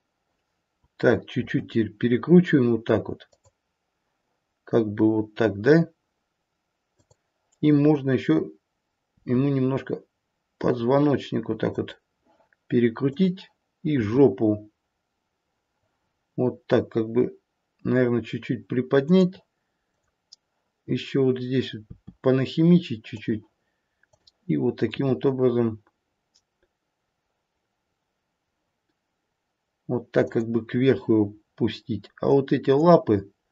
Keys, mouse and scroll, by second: 1.3 r, 6.8 click, 9.0 r, 13.0 click, 14.8 r, 19.7 click, 21.8 r, 24.0 click, 27.1 r, 32.2 click.